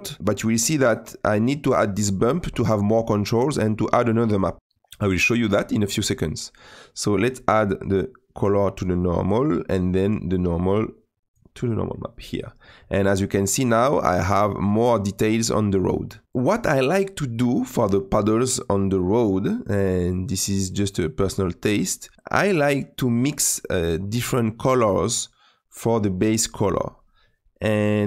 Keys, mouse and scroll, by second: 0.2-8.8 drag, 11.4 click, 16.2 click, 19.2-22.4 drag, 23.5 click.